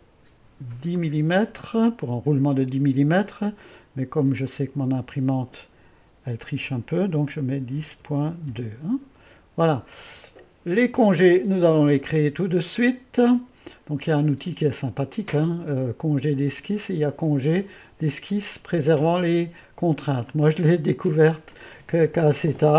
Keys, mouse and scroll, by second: 1.0 click, 4.5 click, 7.5-9.4 typing, 9.2 Return, 11.9-14.8 middle drag, 14.8-17.9 drag, 20.4-22.7 drag.